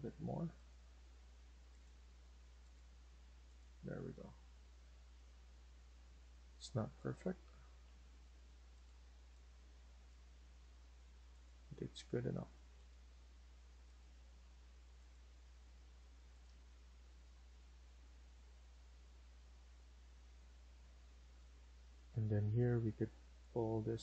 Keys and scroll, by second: 3.6 Escape, 4.3 Escape, 7.7 Delete, 10.9 Escape, 16.4 Escape, 16.7 Escape, 21.7 Escape, 21.9 Escape.